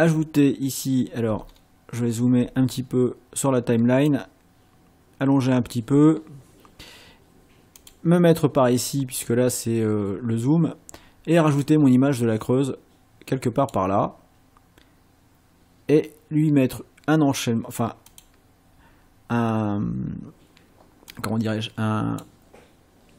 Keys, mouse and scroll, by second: 1.4-2.4 ctrl+scroll up 4, 4.1-5.9 drag, 7.8 click, 11.6-13.9 drag, 18.1 click, 21.2-22.4 drag.